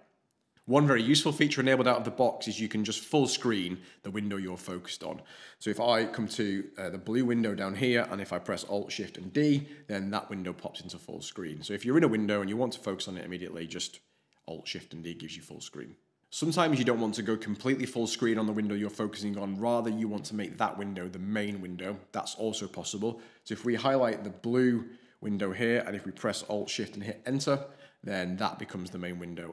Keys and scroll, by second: 27.2 alt+shift+Return.